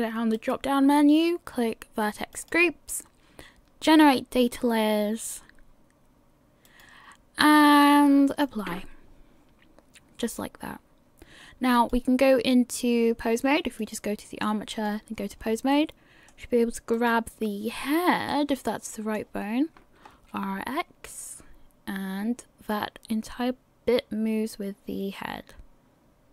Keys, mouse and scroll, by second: 0.3 click, 3.8 click, 6.6 click, 11.7 click, 13.8 click, 15.7 middle click, 17.2 right click, 17.7 scroll up 4, 18.3 shift+middle click, 19.4-20.0 scroll down 1, 20.2 r.